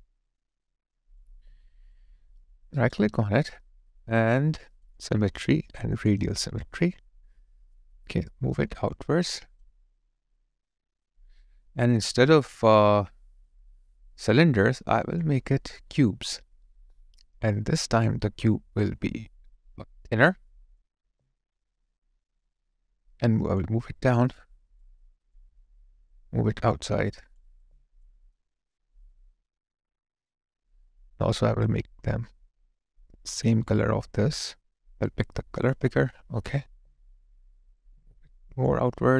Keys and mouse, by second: 21.0 alt+click, 23.6 alt+click, 23.8 alt+middle click, 24.3 alt+right click, 25.0 alt+click, 27.5 alt+click, 28.3 alt+middle click, 29.0 alt+click.